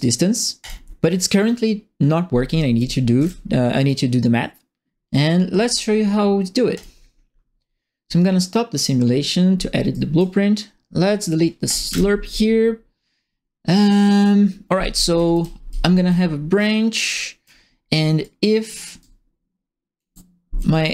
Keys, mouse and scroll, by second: 0.6 click, 2.5-3.7 typing, 2.5-3.8 right drag, 6.7 click, 8.7 click, 9.9 right click, 11.6 click, 11.8 Delete, 15.1 b, 15.2 click, 15.7 click, 16.5 click, 18.2 click, 18.8-19.9 ctrl+drag, 20.6 click.